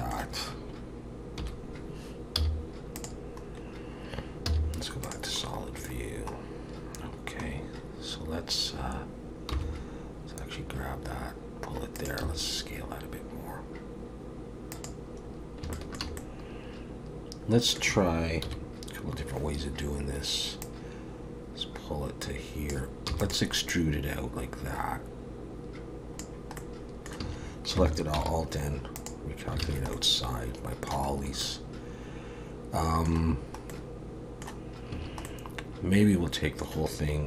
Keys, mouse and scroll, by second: 1.4 KP_1, 2.4 z, 4.5 z, 5.5-7.5 scroll down 2, 9.5-10.0 scroll down 2, 9.5 g, 12.2 s, 15.3-15.6 scroll up 1, 15.7 shift+middle click, 16.2 middle click, 18.4 KP_1, 20.6 click, 23.1 e, 23.7 click, 26.6 middle click, 27.2 a, 28.1 alt+n, 29.6 alt+a, 29.9 middle click, 31.1-31.4 scroll up 3, 31.4 middle click, 33.2-33.7 scroll down 2, 33.7 middle click, 34.9 a, 35.2 middle click.